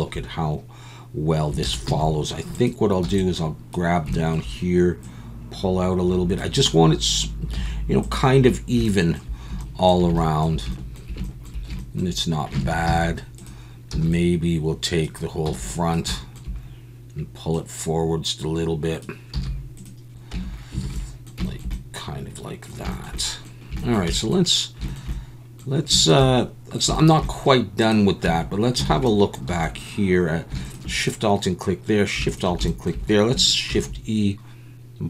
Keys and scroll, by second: 1.6 alt+a, 1.9 z, 3.0 b, 7.5 z, 12.6 alt+a, 12.9 z, 13.9 b, 15.5 b, 19.3 z, 20.3 Tab, 20.8 alt+a, 28.2 Tab, 28.9 alt+a, 29.5 2, 33.7 shift+e.